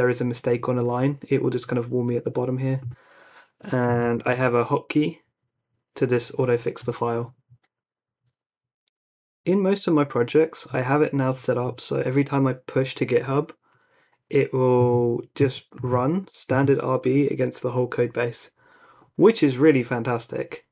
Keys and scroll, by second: 3.6-4.8 typing.